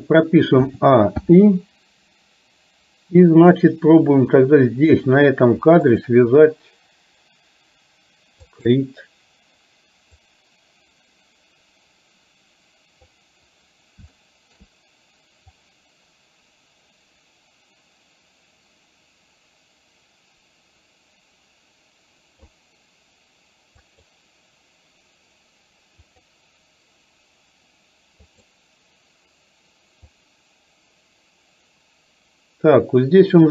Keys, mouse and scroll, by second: 1.0 a, 1.4 i, 5.0 click, 6.0 shift+click, 8.5 click, 10.3-13.3 drag, 14.3-14.6 shift+middle drag, 15.6-22.6 drag, 23.9 click, 26.1 click, 28.4 click, 30.3-33.5 drag.